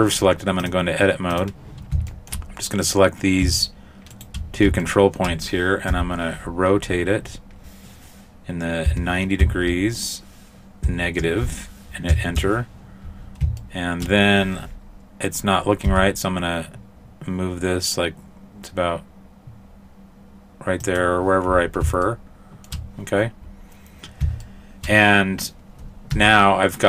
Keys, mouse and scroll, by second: 0.6 click, 2.1 shift+middle click, 2.9 right click, 4.9 shift+middle click, 4.9 shift+right click, 5.9 r, 13.6 shift+middle click, 15.9 g, 22.1 shift+middle click, 24.5 shift+middle click, 26.2 Tab.